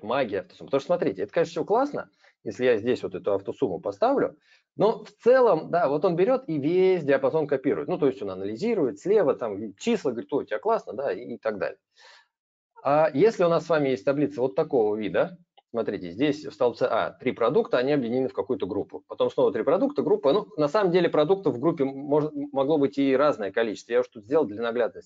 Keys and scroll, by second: 3.0 ctrl+a, 3.7 alt+=.